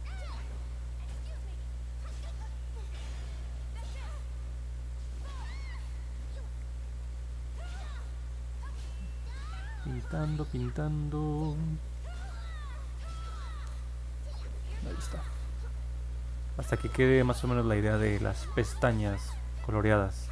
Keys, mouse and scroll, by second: 0.4 click, 1.1 click, 1.5 click, 2.4 click, 2.8 click, 4.3 click, 4.7 click, 5.1 click, 5.4 click, 5.7 click, 6.0 click, 6.3 click, 6.6 click, 6.9 click, 8.0 click, 8.3 click, 8.6 click, 8.9 click, 9.4 click, 10.3 click, 10.5 click, 10.8 click, 11.1 click, 11.4 click, 11.7 click, 12.0 click, 12.3 click, 12.5 click, 12.9 click, 15.7 middle click, 15.7-16.3 scroll down 3, 16.4 scroll up 2, 17.1 alt+middle click, 18.2-18.8 scroll up 4, 19.6 alt+middle click.